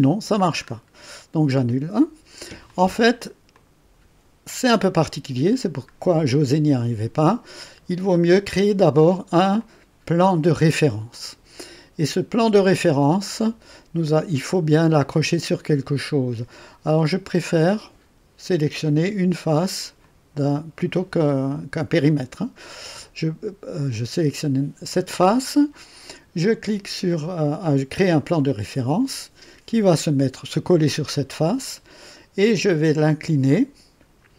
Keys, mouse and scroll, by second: 0.2-0.6 scroll down 1, 0.6 scroll up 1, 1.5 click, 2.7-3.4 drag, 3.5 click, 4.7-5.3 drag, 9.6-11.5 drag, 20.0 click, 28.3 click, 33.5-34.3 drag.